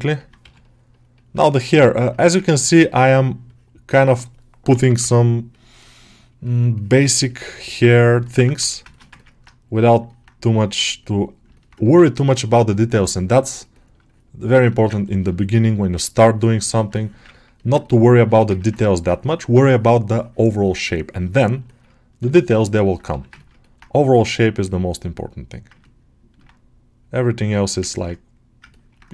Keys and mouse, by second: 0.0 middle click, 0.3 g, 0.5-1.6 middle drag, 1.7 ctrl+middle click, 2.8 1, 3.0 middle click, 4.6 [, 4.7 [, 5.4-7.9 middle drag, 8.1 ctrl+alt+middle click, 8.4 g, 8.8 alt+shift+middle click, 9.0 ctrl+middle click, 9.9 middle click, 11.4 middle click, 12.9-14.8 drag, 14.8 ctrl+alt+middle click, 15.0 ctrl+middle click, 15.2 middle click, 16.1 click, 16.8 middle click, 17.2 ctrl+middle click, 17.4 middle click, 17.7 middle click, 18.4 ctrl+middle click, 21.5 ctrl+middle click, 22.1 alt+q, 22.4 ctrl+middle click, 22.7 middle click, 23.0 g, 23.3 ctrl+middle click, 23.5 alt+middle click, 24.0-25.1 right drag, 25.7 ctrl+alt+middle click, 27.5 alt+shift+middle click, 27.7 ctrl+middle click, 28.6 ctrl+middle click.